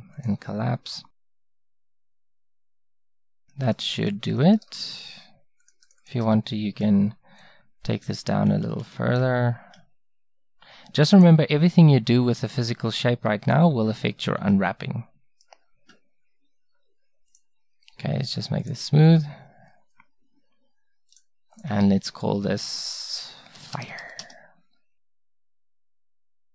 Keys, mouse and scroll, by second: 5.6 right click, 7.4-8.5 middle drag, 11.5-13.9 drag, 13.9 Tab, 14.5-17.1 drag, 17.7-24.2 right drag, 26.0-26.5 drag.